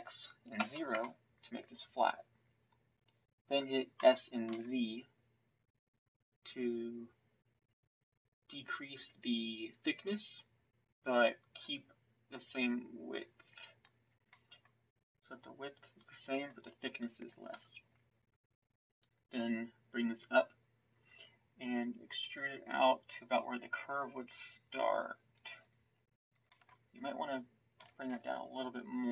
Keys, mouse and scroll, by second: 3.9 s, 14.3-17.5 middle drag, 17.5 KP_1, 22.1 e, 26.5 middle click, 27.8 s.